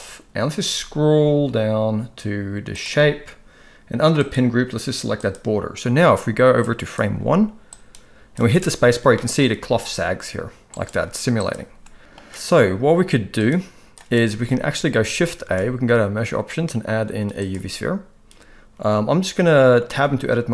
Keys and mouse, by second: 2.8 click, 4.2-5.3 drag, 6.6 click, 7.7 click, 8.6 space, 10.7-12.0 right drag, 12.0 middle click, 12.0 space, 13.4 click, 15.3 shift+a, 19.9 Tab.